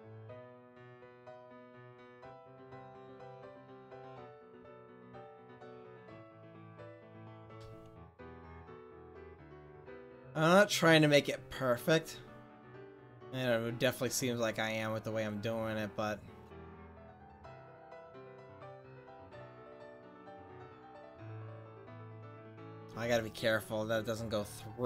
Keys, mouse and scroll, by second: 1.8 click, 1.9-2.9 middle drag, 3.0-4.4 middle drag, 4.4-5.4 drag, 5.4 middle click, 6.1 middle click, 8.3 r, 21.6-22.8 middle drag, 24.5 click.